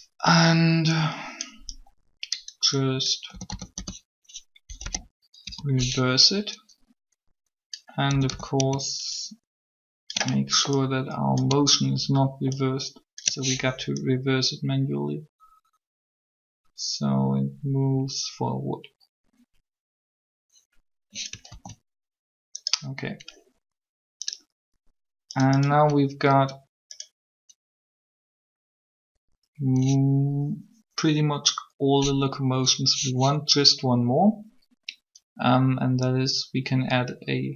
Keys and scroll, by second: 3.3-5.4 typing, 8.1 a, 8.3 a, 21.5 alt+a.